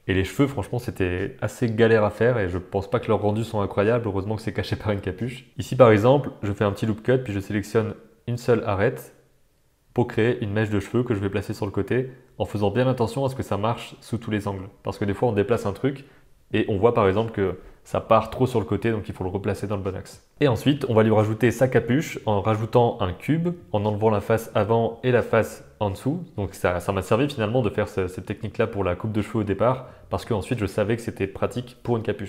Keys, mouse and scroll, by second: 0.1 e, 0.8 r, 1.2 r, 1.7 r, 2.0 middle click, 2.7 click, 2.9 shift+click, 3.1 e, 3.7 g, 4.6 middle click, 4.9 f, 5.0 g, 5.2 g, 5.4 middle click, 5.5 ctrl+r, 5.8 click, 5.9 ctrl+r, 6.4 g, 6.5 middle click, 7.5 middle click, 8.0 ctrl+r, 8.7 click, 9.1 click, 9.3 click, 9.8 click, 9.8 middle click, 10.2-13.1 typing, 13.7 middle click, 14.2 Tab, 14.5 alt+a, 15.0 middle click, 16.1 shift+middle click, 16.3 Tab, 16.5 click, 16.8 r, 17.1 g, 17.6 middle click, 17.9 super+z, 18.1 middle click, 18.2 g, 18.6 middle click, 19.7 ctrl+r, 20.2 click, 20.3 middle click, 20.3 g, 20.7 Tab, 21.7 middle click, 22.0 shift+a, 22.9 g, 23.2 g, 23.7 middle click, 24.1 Tab, 24.5 click, 24.8 x, 25.1 click, 25.2 x, 25.4 middle click, 25.5 Tab, 25.6 s, 26.2 click, 26.5 click, 27.3 middle click, 27.6-31.8 typing, 29.6 middle click, 30.1 middle click, 31.2-31.7 middle drag, 32.2 middle click.